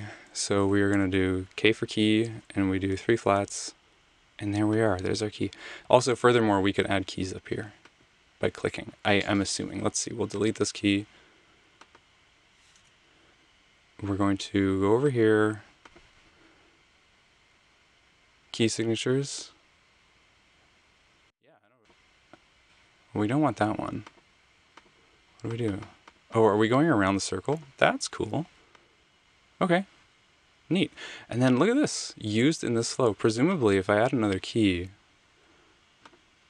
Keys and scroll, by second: 0.9 k, 2.5-3.4 typing, 12.8 BackSpace.